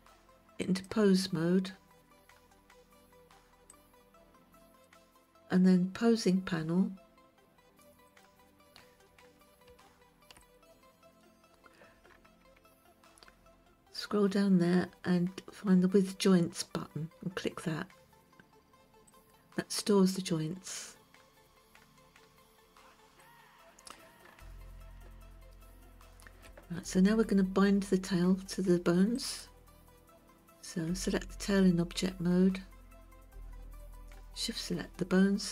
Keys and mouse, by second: 3.7-4.9 drag, 8.2 click, 10.5 click, 19.3 click, 23.2 click, 25.1-26.5 shift+middle drag, 29.2 click, 33.9 shift+click.